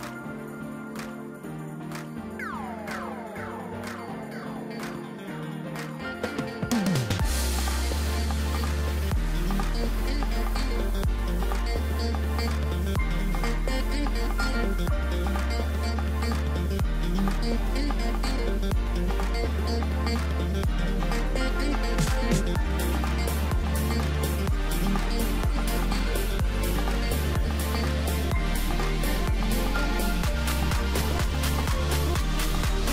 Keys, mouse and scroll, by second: 0.4-1.2 scroll down 4, 1.2 Tab, 1.6-4.4 right drag, 4.4-8.2 drag, 8.2-8.6 scroll up 3, 8.6-9.4 scroll down 2, 9.5 3, 11.1 click, 13.6 shift+click, 15.2-16.7 shift+drag, 18.3 x, 20.4 middle click, 21.1 scroll up 2, 21.4 Tab, 22.8 shift+d, 24.9 scroll down 4, 25.1-27.0 middle drag, 27.0 click, 27.4-27.9 middle drag, 27.9 click, 28.3-28.6 scroll up 2, 28.6 Tab, 29.3 KP_7, 30.0-30.3 scroll up 2, 30.3 2, 30.7-31.1 scroll down 3, 31.6 click, 31.8 click, 32.8 shift+click.